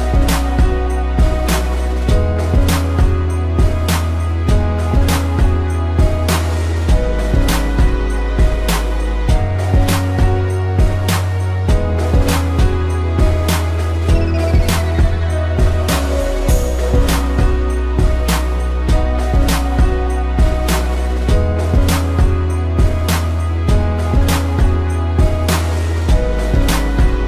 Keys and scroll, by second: 0.1 space, 1.0 space, 2.8 space, 5.4 ctrl+-, 6.0 space, 6.6 ctrl+z, 7.3 ctrl+=, 7.6 space, 8.7 space, 10.0 space, 12.2 space, 14.4 space, 17.4 space, 18.4 space, 20.2 space, 20.5 ctrl+-, 22.9 space, 23.3 ctrl+=, 23.4 space, 25.5 ctrl+-, 25.8 a, 27.1 space.